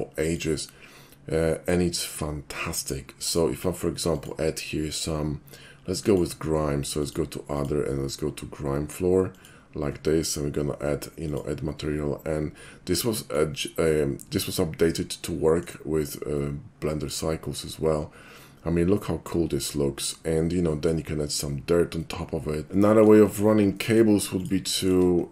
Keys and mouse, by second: 0.3 click, 3.3 click, 4.2 click, 6.0 click, 7.0 click, 7.6 click, 9.3 click, 11.3 click, 12.6 middle click, 14.6-15.7 middle drag, 16.4-17.1 middle drag, 20.3 middle click, 20.7 middle click, 22.0-22.7 middle drag, 22.8 middle click, 23.3 shift+middle click, 23.8 shift+middle click, 24.4 shift+click, 24.7 shift+middle click.